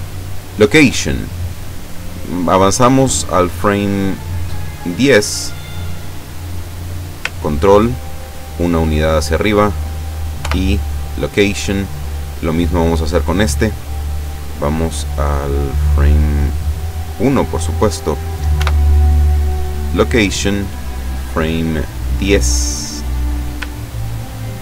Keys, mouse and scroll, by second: 0.6 click, 4.6 click, 7.6-8.8 ctrl+drag, 10.4 i, 11.0 click, 11.8 right click, 12.8 right click, 15.9 click, 16.5 click, 18.6 i, 19.9 click, 21.9 click, 22.3 click, 24.4-24.6 ctrl+drag.